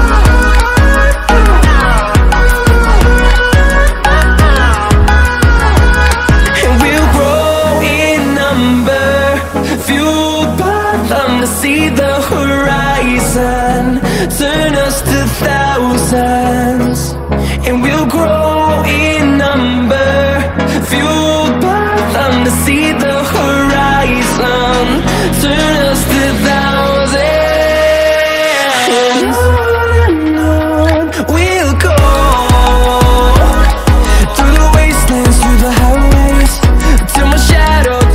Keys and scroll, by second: 30.8 ctrl+t, 35.9 ctrl+t.